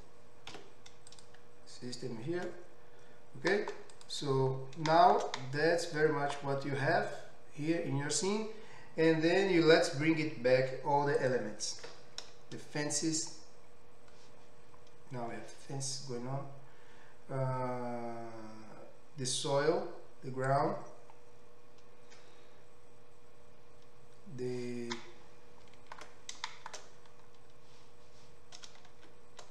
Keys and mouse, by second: 0.5 x, 3.0 Tab, 4.0 drag, 4.2-13.2 middle drag, 13.2-29.5 drag, 27.2 middle click, 29.0 shift+z.